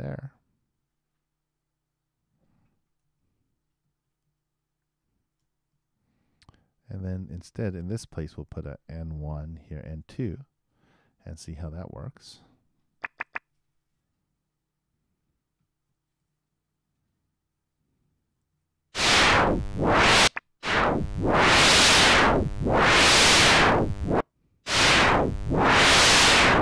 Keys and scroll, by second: 3.0 super+c, 4.2 super+v, 16.2 super+Return, 18.5 super+Return.